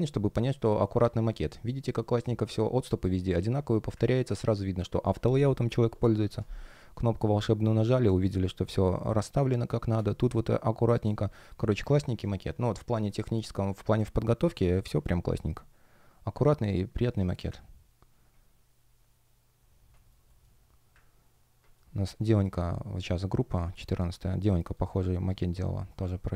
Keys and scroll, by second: 8.7 space, 10.9 space, 19.8 shift+o, 20.1 shift+g, 21.7 space, 23.7 shift+o, 24.4 shift+g.